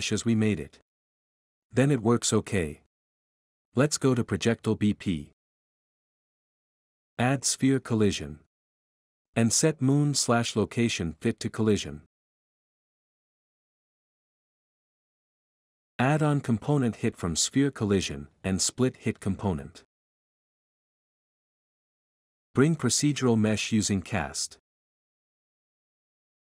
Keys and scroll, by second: 4.9-7.6 typing, 9.6-10.8 typing, 23.3-25.2 typing.